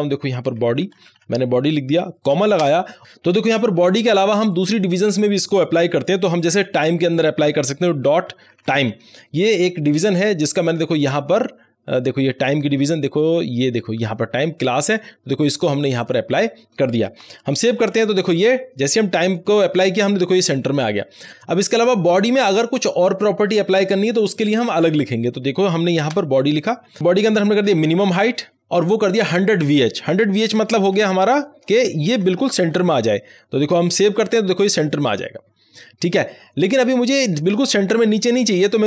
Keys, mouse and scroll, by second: 0.6-2.5 typing, 4.4 click, 4.4 click, 8.0 click, 8.2-9.3 typing, 11.9 click, 13.3 scroll down 1, 14.7 click, 17.4 ctrl+s, 19.2 click, 26.0 Return, 26.2-28.6 typing, 30.4-32.6 typing, 33.1 Right, 34.0 ctrl+s.